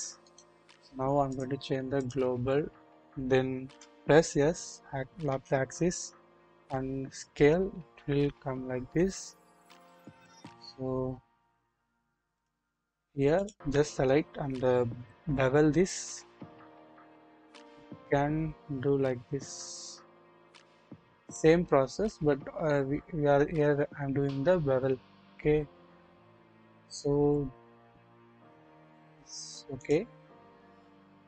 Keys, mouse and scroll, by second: 0.2 right click, 1.4-2.3 drag, 3.6 s, 3.6 s, 5.3 z, 12.3 click, 13.3 alt+click, 14.9 ctrl+b.